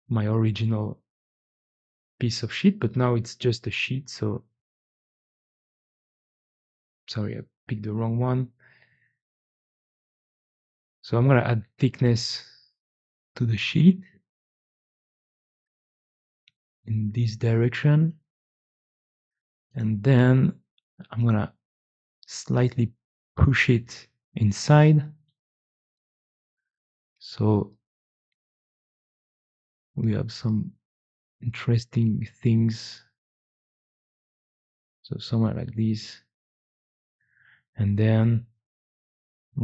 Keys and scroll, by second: 0.1 typing, 5.6 ctrl+z, 6.0 ctrl+z, 6.4 ctrl+z, 6.6 ctrl+z, 19.0 typing, 22.8-23.9 typing, 25.8 typing, 37.8 3.